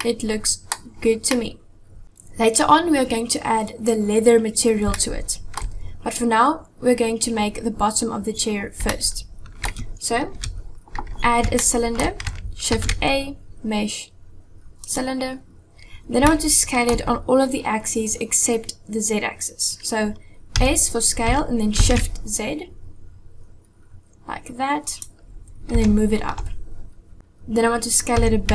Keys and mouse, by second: 0.0-0.6 middle drag, 1.4-2.0 middle drag, 5.0 shift+middle click, 9.0-9.4 shift+middle drag, 10.4 KP_1, 11.5-12.0 shift+middle drag, 12.6 shift+a, 16.3-16.9 shift+drag, 20.6 s, 25.8 g, 28.2 s.